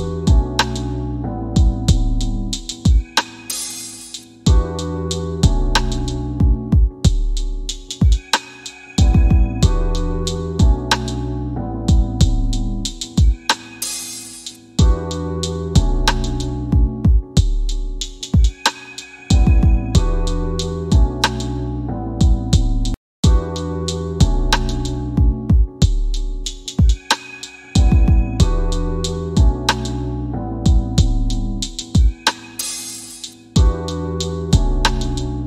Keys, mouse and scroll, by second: 0.4 scroll down 1, 2.1 click, 4.5 click, 11.9 click, 30.5 click.